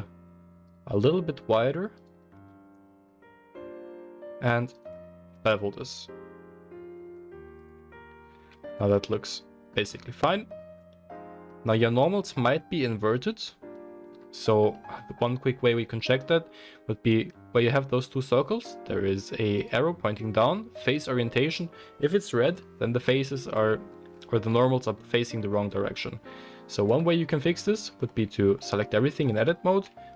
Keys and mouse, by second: 0.6 alt+shift+click, 0.7-1.9 alt+shift+middle drag, 1.9-2.2 alt+shift+drag, 2.4 s, 4.7 alt+click, 5.3 ctrl+b, 7.7 Tab, 8.3-11.2 middle drag, 9.8 Tab, 11.2 shift+click, 11.4-19.7 shift+middle drag, 12.4 Tab, 19.7-30.1 drag, 25.3 Tab, 28.0 a.